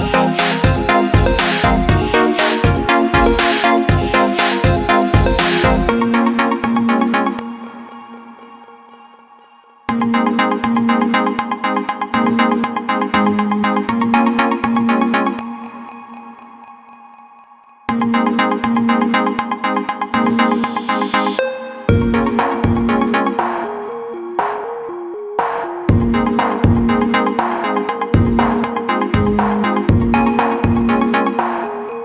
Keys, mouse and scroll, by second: 1.9 ctrl+2, 3.5 click, 9.0 alt+shift+click, 10.1 click, 15.7 click, 17.5 click, 20.2 click, 21.9 click, 26.6 click, 27.8 click.